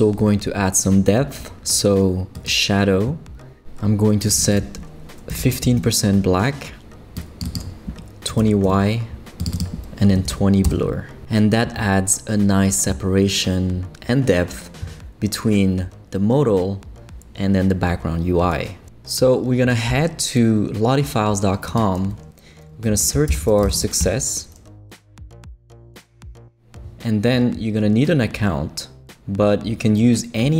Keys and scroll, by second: 5.3 l, 5.6 5, 5.8 Return, 8.1-8.9 typing, 9.9-10.8 typing, 19.4 typing, 22.7-24.1 typing.